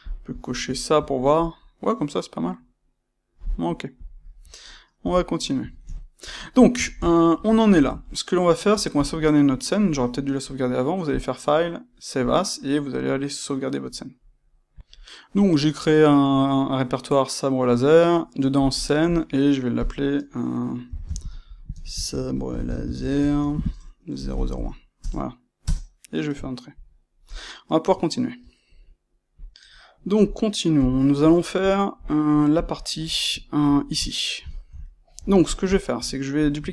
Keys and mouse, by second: 3.9 click, 5.0 n, 5.4-11.0 middle drag, 11.0-14.8 drag, 25.7-26.9 drag, 26.9-32.5 middle drag, 30.7 KP_1, 32.5 click, 33.3-36.3 ctrl+middle drag, 36.3 click, 36.6-36.7 ctrl+middle drag.